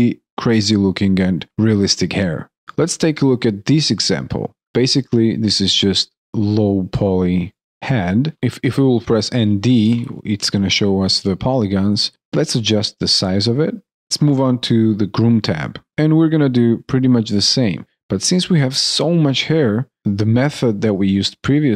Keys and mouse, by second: 3.7 alt+click, 6.8 alt+click, 7.6 alt+middle click, 12.1 alt+right click, 13.9 alt+click, 15.9 alt+click.